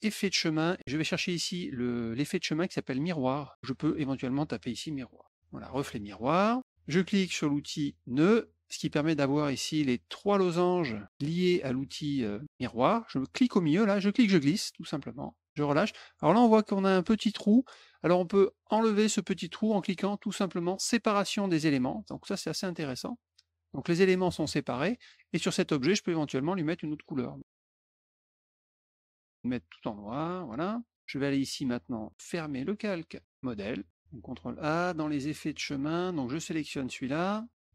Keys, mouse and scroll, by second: 0.1 click, 3.7 click, 5.2 m, 5.6 click, 8.2 click, 14.0-15.5 drag, 15.7 middle click, 16.8 scroll up 2, 22.0 click, 23.0 click, 25.3 click, 26.9 click, 27.5 click, 28.2 shift+click, 30.0 click, 31.2 click, 33.4 click, 35.9 click, 36.6 click.